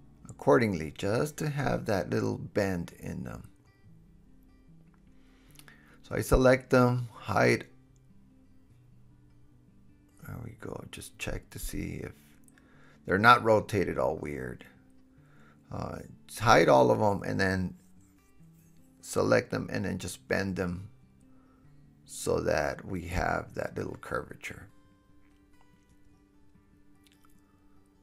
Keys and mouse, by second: 0.7 g, 1.5-2.0 drag, 2.5 g, 3.0 drag, 3.4 g, 3.7-4.7 drag, 4.7 right click, 4.9 click, 5.0 KP_7, 5.6-6.4 middle drag, 5.6 right drag, 5.9 g, 6.4-9.4 drag, 8.0 alt+h, 9.4 shift+middle click, 9.4-10.4 shift+drag, 10.4 middle click, 10.5 click, 11.3-13.4 middle drag, 13.4 click, 13.7 middle click, 14.5 drag, 14.7 middle click, 14.8 click, 15.1 middle click, 15.8-19.6 drag, 18.5 shift+h, 18.9 KP_1, 19.6-20.1 middle drag, 20.1-20.7 drag, 20.1 g, 20.7 middle click, 20.8-21.8 drag, 20.8 g, 21.6 super+z, 23.5 g, 24.1 click, 24.6 g, 25.0 drag, 25.3 g, 25.7 drag, 26.1 g, 26.6 middle click, 27.3-28.0 drag.